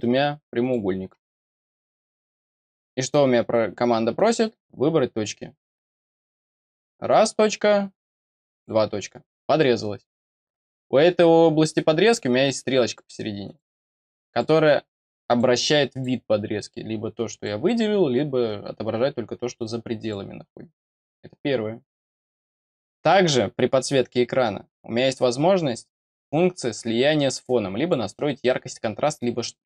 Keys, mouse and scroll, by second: 0.5 click, 4.1 click, 6.3 click, 8.4 click, 13.4 click, 25.6-27.8 drag, 28.4-29.6 drag.